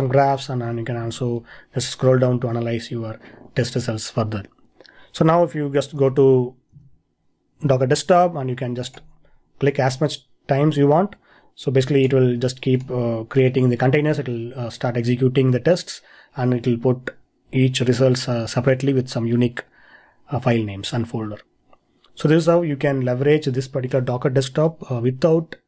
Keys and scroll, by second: 6.0 super+Tab, 6.7 super+Tab.